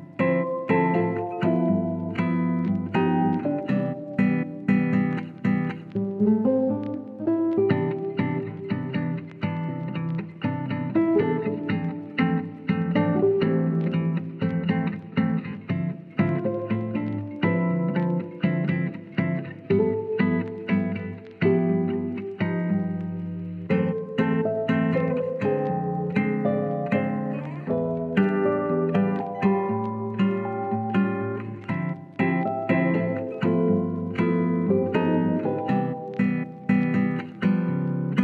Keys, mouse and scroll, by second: 1.3 click, 1.8 ctrl+z, 2.2 click, 4.2 Tab, 4.7 middle click, 5.1 alt+z, 5.5-6.5 middle drag, 6.9 Tab, 7.5-8.6 drag, 9.5 KP_3, 9.8 alt+z, 11.0 click, 11.4 click, 12.1 click, 12.9 Tab, 13.2 middle drag, 13.5 alt+z, 14.3-15.3 middle drag, 15.5-16.5 drag, 16.5 middle click, 17.3 ctrl+s, 21.8 n, 24.2 click, 26.3 click, 27.7 click, 28.6 click, 31.3 click, 36.0 click, 37.2 ctrl+s, 38.0-38.2 drag.